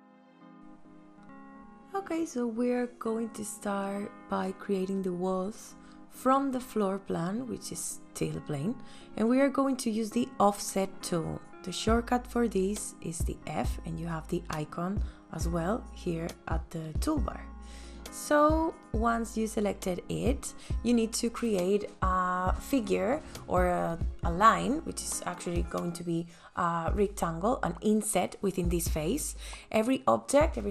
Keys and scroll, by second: 15.1 space, 17.4 f, 29.4 space.